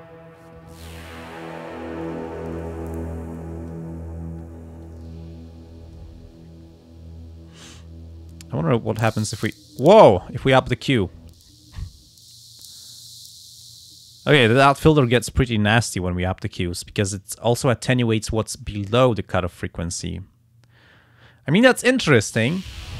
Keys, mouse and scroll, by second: 4.9-6.1 drag, 8.9-13.9 drag, 15.1-18.2 drag, 20.1-22.2 drag.